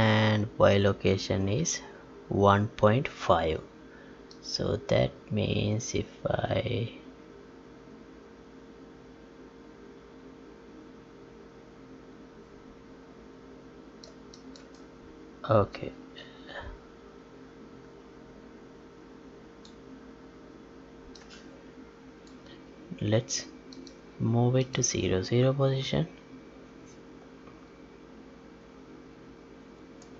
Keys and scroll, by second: 29.8 Tab.